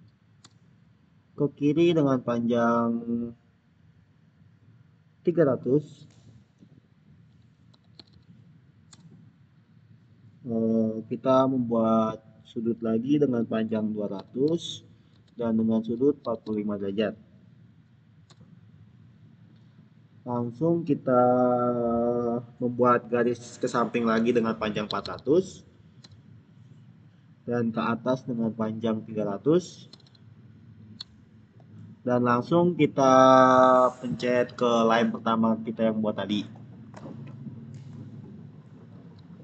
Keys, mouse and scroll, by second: 0.0-0.1 typing, 0.3 Return, 7.6-8.5 typing, 8.8 Return, 14.0 Return, 14.1-16.8 typing, 15.0 Tab, 18.1 Return, 24.7-25.5 typing, 25.9 Return, 29.5 Return, 29.6-30.4 typing, 30.8 Return, 37.0 Return, 38.9 click.